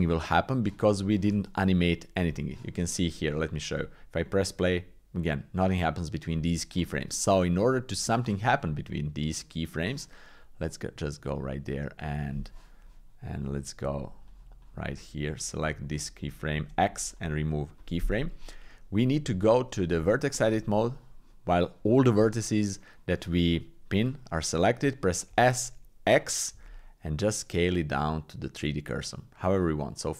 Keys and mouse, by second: 2.2 click, 3.7 click, 6.3 click, 8.9 click, 10.7 click, 11.9 click, 14.3 click, 15.4 click, 15.9 click, 16.6 x, 19.1 Tab, 20.0 shift+click, 25.3 s.